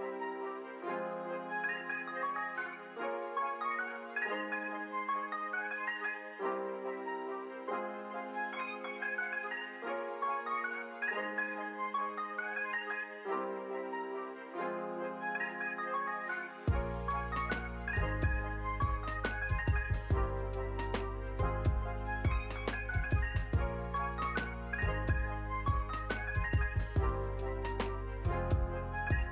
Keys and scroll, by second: 7.7 ctrl+s, 24.7 ctrl+d, 26.3 Return, 27.0-28.4 typing.